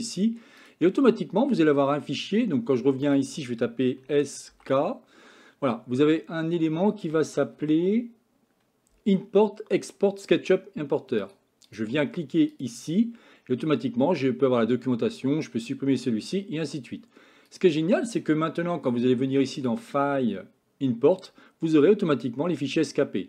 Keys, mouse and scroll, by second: 19.6-22.6 drag.